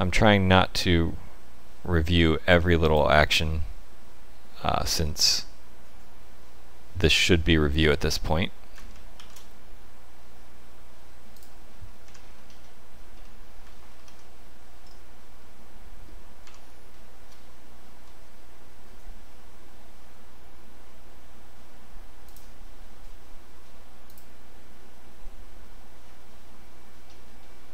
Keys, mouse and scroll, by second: 9.1 ctrl+alt+shift+s, 12.0 Tab, 12.2-13.2 scroll down 5, 13.2 middle click, 13.4 scroll down 1, 13.9 ctrl+2, 14.8 middle click, 16.4 Tab, 16.9 shift+middle click, 22.2 click, 27.0-27.7 scroll up 4.